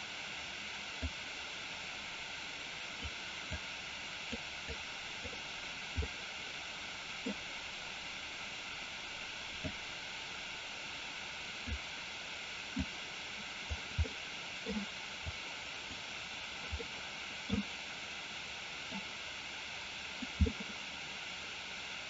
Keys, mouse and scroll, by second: 1.0-3.1 drag, 3.6 click, 4.8 click, 6.1-7.3 middle drag, 9.8-11.8 drag, 12.9 click, 14.0 middle click, 15.5 click, 16.9 middle click, 18.9-20.4 drag, 20.5-22.0 middle drag.